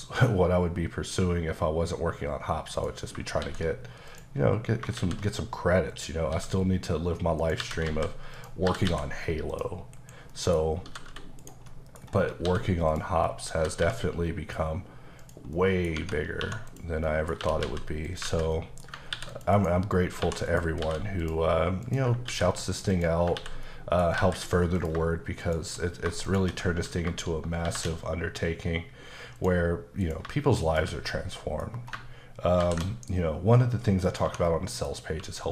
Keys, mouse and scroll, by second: 0.4-2.0 scroll down 3, 2.0-2.8 scroll down 1, 2.8 click, 3.5 shift+s, 4.1 click, 5.0 shift+a, 5.9 click, 6.4 s, 7.4 click, 7.6-8.9 typing, 8.4 click, 9.6 click, 10.0 KP_Decimal, 10.3 middle click, 10.9 g, 11.4 right click, 11.7 middle click, 12.3 scroll down 2, 12.5 s, 13.0 click, 13.3 middle click, 13.8 g, 15.2 click, 15.6 middle click, 16.0 Tab, 16.7 click, 17.1 middle click, 17.4 typing, 18.1 click, 18.5 middle click, 19.1 ctrl+r, 19.3 click, 19.6 right click, 20.2 1, 20.5 click, 20.8 x, 21.2 click, 21.9 click, 22.3 ctrl+x, 23.0 click, 23.4 ctrl+x, 23.7 middle click, 24.2 alt+z, 24.8 click, 25.4 shift+click, 26.3 shift+click, 27.6 ctrl+shift+b, 29.1 scroll up 1, 29.4 click, 30.0 click, 30.6 shift+click, 31.1 middle click, 31.7 scroll up 1, 32.6 ctrl+shift+b, 34.1 click, 34.2 Tab, 34.5 middle click, 35.1 q.